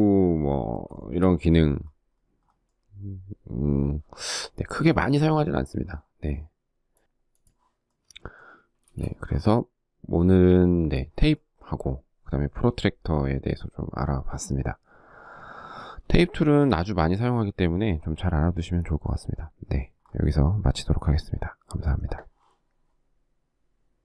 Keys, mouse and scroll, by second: 0.0 shift+middle click, 7.6 space, 15.0 shift+middle click.